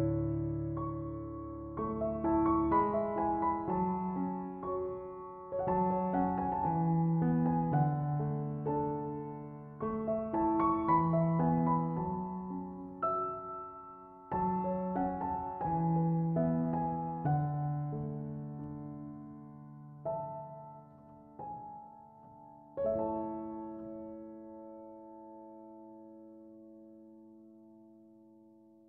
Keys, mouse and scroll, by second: 0.0-0.7 middle drag, 0.7-3.8 drag, 4.2-7.1 middle drag, 7.1-9.8 drag, 9.8-12.0 middle drag, 12.0-12.6 scroll up 1, 12.6-14.5 middle drag, 14.5 click, 15.4-17.7 middle drag, 17.7-18.1 scroll down 1, 18.1-20.3 shift+middle drag, 20.3 click, 23.4-26.4 drag.